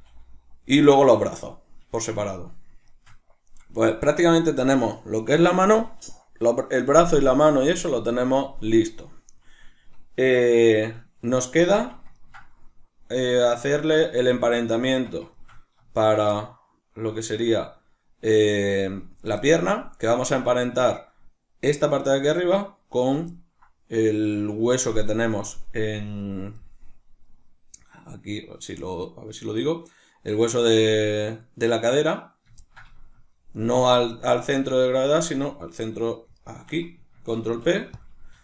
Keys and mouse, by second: 1.1 right click, 2.1-14.2 shift+middle drag, 3.9 Tab, 14.2 right click, 14.9 Tab, 15.3 shift+middle click, 16.0 shift+right click, 16.3-33.6 ctrl+middle drag, 33.6 right click, 34.1 right click, 34.3 right click, 34.5 right click, 34.7 right click, 35.5 right click, 36.4 shift+right click, 37.5 ctrl+p.